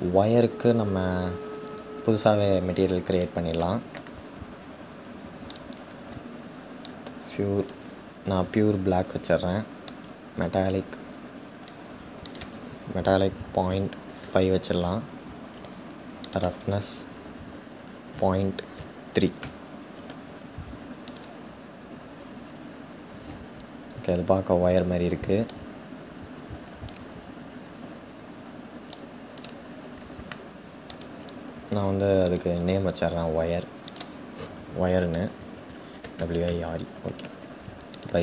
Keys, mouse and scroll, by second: 2.9-6.4 drag, 9.8-19.0 drag, 21.7-24.3 scroll up 6, 24.3-25.0 scroll up 1, 25.0 scroll up 1, 25.2-26.7 drag, 26.7-28.1 scroll down 4, 28.1-28.6 scroll down 1, 28.6 click, 29.2-30.3 scroll down 3, 30.3 scroll down 1, 30.6 click, 32.0 click, 36.1-37.6 drag.